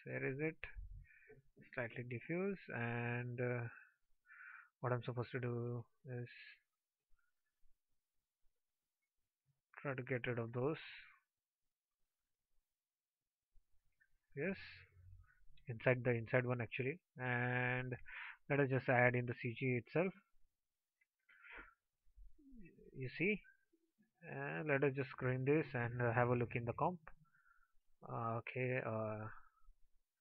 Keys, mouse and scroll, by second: 5.8 ctrl+c, 6.3 ctrl+v, 18.2 ctrl+x.